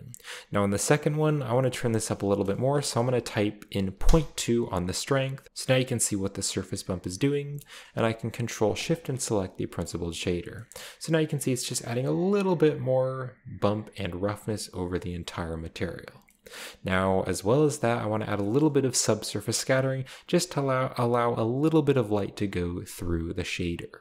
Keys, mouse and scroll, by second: 0.9 click, 1.7 click, 2.3 click, 2.6 BackSpace, 2.7 BackSpace, 4.0 Return, 7.7-8.6 ctrl+shift+middle drag, 8.7 ctrl+shift+click, 9.3-10.1 scroll down 1, 10.2-10.5 middle drag, 10.7-11.9 scroll up 3, 10.7-11.2 middle drag, 11.6-12.2 middle drag, 14.1-15.5 scroll down 1, 16.5 middle click, 16.6-17.3 scroll up 1, 18.5-19.4 scroll up 2, 18.6 middle click, 19.5-20.3 scroll down 2, 22.5-24.0 scroll up 2.